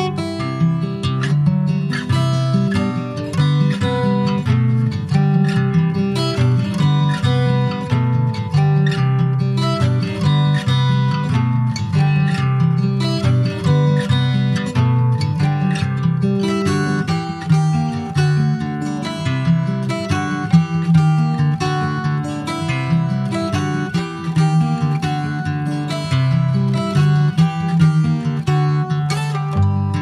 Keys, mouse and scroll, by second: 1.7 middle click, 2.1 Tab, 2.7 click, 3.8 i, 5.9 alt+middle click, 6.8 scroll up 2, 7.4-8.5 shift+middle drag, 8.5-10.1 right drag, 10.1 s, 12.7-14.3 middle drag, 14.8 alt+middle click, 15.9 alt+middle click, 17.0 click, 20.0 r, 22.2 click, 23.9 r, 25.2 s, 26.9 middle click, 27.5 scroll down 3, 27.8 middle click, 28.1 Tab, 28.3 click, 28.8 shift+middle click, 29.4 ctrl+scroll up 1, 29.6 ctrl+s, 29.6 click, 29.8 Tab.